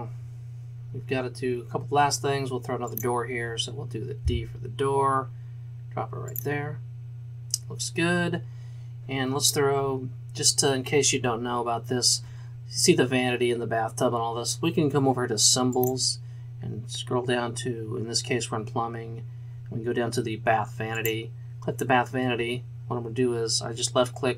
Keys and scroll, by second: 4.3 d.